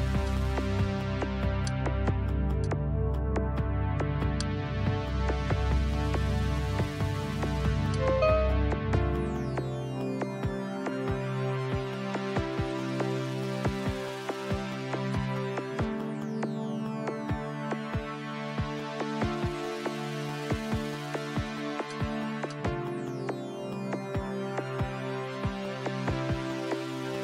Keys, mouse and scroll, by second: 2.7 click, 4.4 click, 8.0-13.8 drag, 15.2 click, 17.4 click, 21.9-25.7 drag, 25.4 KP_1, 25.7 KP_2, 25.9 KP_Enter.